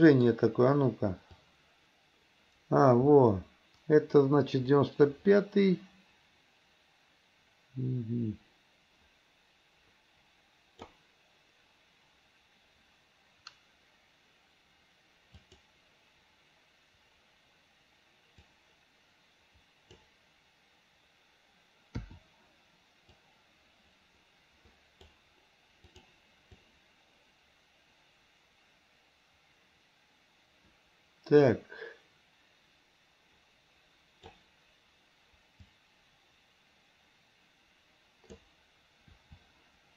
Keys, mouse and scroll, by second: 1.5-11.0 drag, 15.4 click, 18.6-20.0 drag, 23.3-25.3 drag, 26.0 click, 26.7-34.5 drag, 35.7 click, 35.9-38.5 drag.